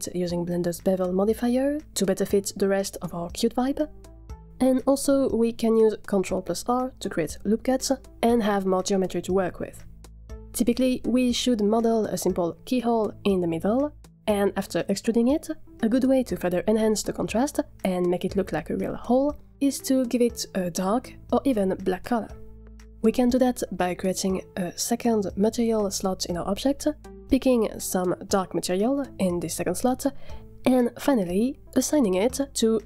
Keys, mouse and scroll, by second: 0.1 middle click, 0.2 Tab, 0.6 click, 0.8 shift+click, 1.4 shift+middle click, 1.6 Tab, 1.6 a, 1.8 s, 1.9 a, 2.0 scroll up 1, 2.0 Tab, 2.1 shift+middle click, 2.6 F3, 2.9 shift+middle click, 3.2 Tab, 3.4 a, 3.4 s, 3.5 a, 5.9 click, 6.4 Tab, 6.6 scroll up 2, 6.7 shift+middle click, 6.9 ctrl+r, 7.4 middle drag, 7.6 click, 7.6 3, 7.7 g, 8.0 middle click, 8.3 a, 8.3 a, 9.4 ctrl+r, 9.7-15.1 typing, 10.1 alt+click, 10.6 alt+click, 11.2 alt+click, 11.5 ctrl+r, 12.3 click, 12.8 ctrl+r, 13.5 click, 14.7 shift+click, 14.9 middle click, 16.1 middle click, 16.7 Tab, 17.2 scroll down 2, 17.7 middle click, 19.2 scroll up 2, 19.4 shift+middle click, 20.1 Tab, 20.9 drag, 24.7-28.3 drag, 32.2 click.